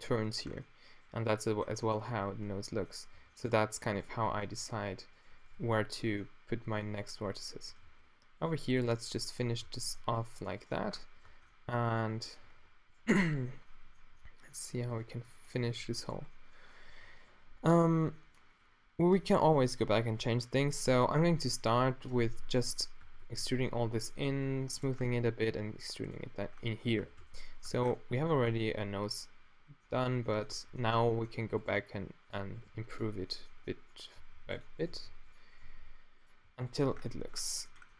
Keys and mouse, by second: 2.1 Tab, 3.2 Tab, 4.3 Tab, 5.7 q, 7.9 e, 8.4 o, 9.7 e, 9.7 f, 10.5 shift+right click, 10.8 f, 11.3 Tab, 12.5 Tab, 15.7 g, 20.9 e, 22.1 s, 22.2-23.6 q, 24.2 s, 25.6 e, 27.0 q, 27.2 q, 27.6 Tab, 30.6 Tab, 31.8 g, 32.6 g, 34.2 g, 34.9 g, 35.7 g, 36.5 g, 36.9 Tab, 37.1-37.5 drag, 37.5-37.9 middle drag.